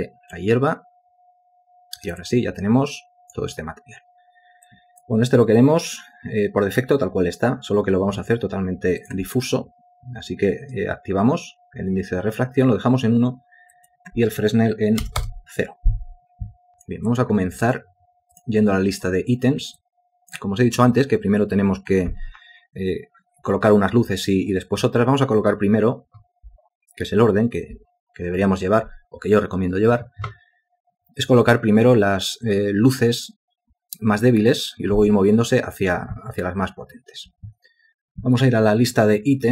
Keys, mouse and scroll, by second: 2.3 alt+click, 15.1 0, 15.3 Return, 16.7 alt+click, 17.2 alt+click, 17.3 alt+double click.